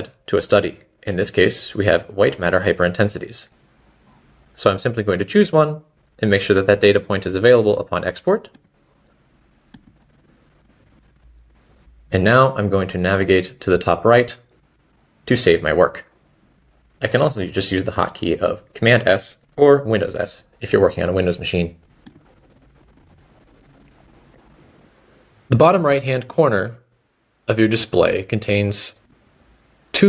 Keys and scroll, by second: 12.9 Escape, 24.6 Escape.